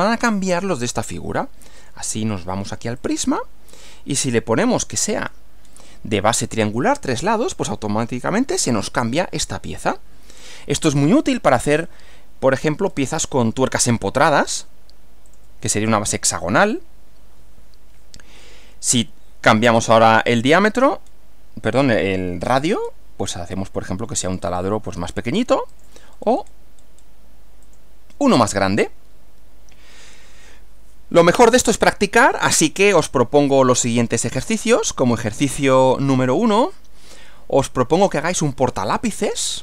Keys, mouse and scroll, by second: 1.8 click, 3.0 click, 4.3 click, 5.0-5.4 scroll down 2, 5.6 scroll down 2, 7.2 click, 10.8 click, 11.8 scroll up 1, 12.9-13.6 scroll up 2, 15.2 click, 19.7 click, 21.0 scroll down 1, 21.8 scroll down 1, 22.8 scroll down 1, 24.3 click, 25.8 click, 26.8-27.2 scroll up 1, 27.7 click, 33.9 click, 35.4-38.2 drag.